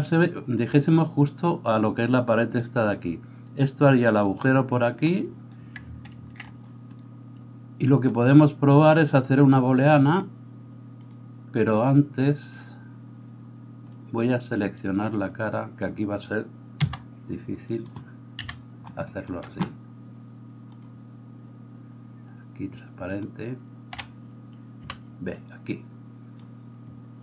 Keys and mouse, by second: 4.3-16.8 right drag, 6.2 ctrl+z, 6.4-9.1 middle drag, 16.8 KP_Divide, 16.8-27.2 middle drag, 18.4 KP_3, 18.9 shift+click, 18.9 shift+right click, 21.4-24.8 drag, 21.4-24.8 right drag, 23.9 a, 24.8 b.